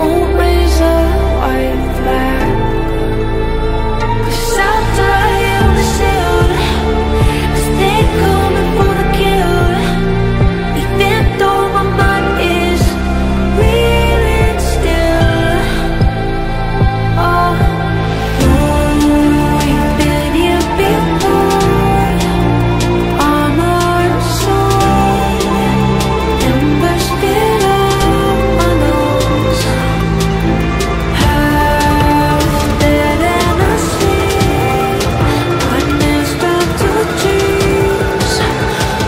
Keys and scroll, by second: 11.8 shift+Page_Up.